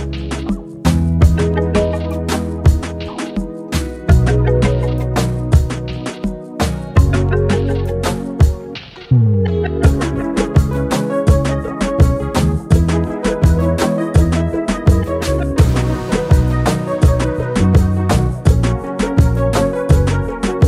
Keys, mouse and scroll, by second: 1.0-3.3 typing, 3.8 Tab, 4.4 scroll up 4, 4.9-5.4 shift+middle drag, 5.4 scroll down 1, 5.6-6.3 shift+middle drag, 6.3 g, 10.9-11.3 scroll down 10, 11.5 scroll up 2, 12.0-13.9 drag, 17.0 click, 17.3 click, 17.9 Tab, 18.5 Left, 18.5 Left, 19.4-19.8 BackSpace, 20.3 Tab.